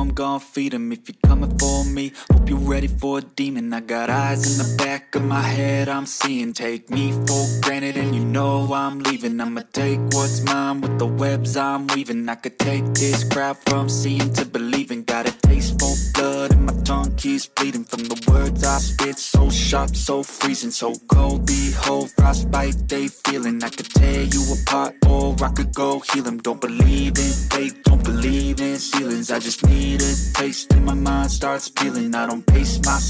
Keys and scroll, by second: 18.4 4, 22.2 space.